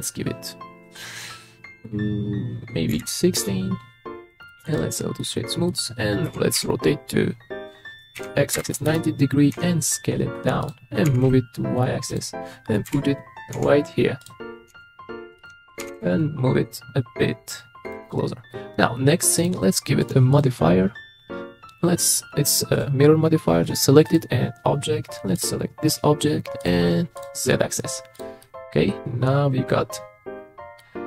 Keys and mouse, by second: 0.0-3.4 drag, 4.4 click, 5.2-5.6 middle drag, 6.3 r, 6.6 y, 8.2 x, 8.5 KP_9, 8.6 KP_0, 8.9 KP_Enter, 9.5 s, 11.1 g, 11.2 y, 12.1 click, 12.8 KP_3, 13.6 s, 14.2 click, 14.7 s, 15.8 g, 16.0 y, 18.5-19.1 middle drag, 20.4 click, 22.8 click, 26.6 click, 27.1 click, 28.4-30.8 middle drag.